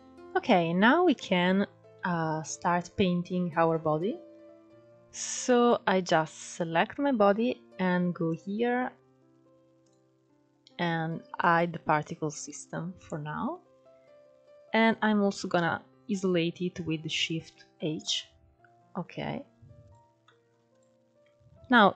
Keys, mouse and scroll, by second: 0.0-0.3 scroll up 3, 0.3-0.8 scroll down 1, 0.8-2.0 middle drag, 2.0-2.9 scroll up 1, 2.9-4.1 scroll down 3, 4.1-4.9 scroll down 1, 4.9-5.4 scroll up 1, 5.4 click, 8.0-9.4 drag, 9.6-11.2 drag, 12.1-15.3 middle drag, 17.2 shift+h, 18.8 click, 19.2 scroll up 1, 19.5 click, 19.9 middle click, 20.4 click, 21.2 Tab.